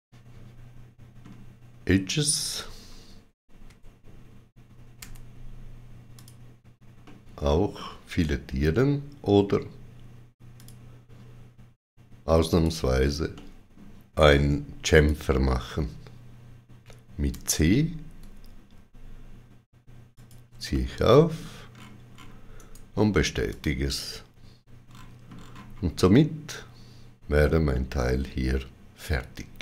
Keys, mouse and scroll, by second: 1.9-2.7 scroll up 3, 4.9 2, 6.0 click, 6.9 middle click, 10.4 shift+click, 12.4 shift+click, 13.2 middle click, 14.8 shift+click, 17.2 c, 20.0 shift+click, 20.6 middle click, 21.7-22.0 scroll up 2, 22.5 right click, 23.4 click, 24.7-25.2 scroll down 4, 25.8 middle click.